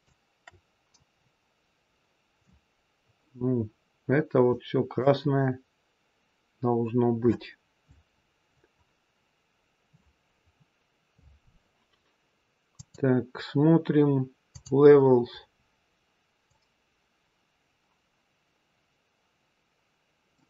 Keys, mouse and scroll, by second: 1.0-1.5 scroll down 1, 1.7-2.7 scroll down 2, 12.7 click, 16.4 click.